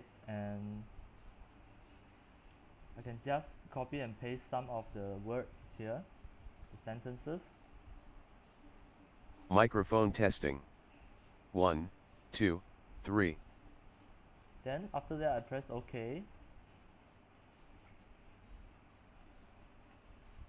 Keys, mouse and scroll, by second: 7.0 ctrl+c, 7.4 click, 7.7 ctrl+v, 9.4-20.4 drag.